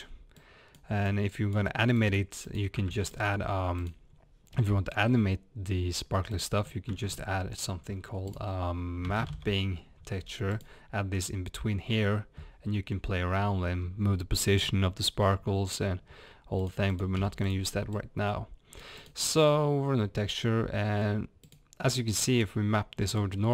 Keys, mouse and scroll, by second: 1.0 click, 10.8 middle click, 17.2 x, 18.3 click, 18.7-19.1 middle drag.